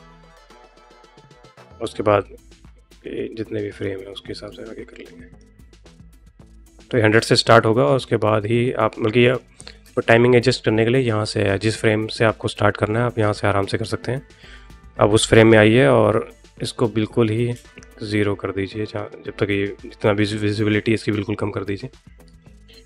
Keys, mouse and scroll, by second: 3.8 click, 5.2 middle click, 7.6-9.2 middle drag, 9.7 space.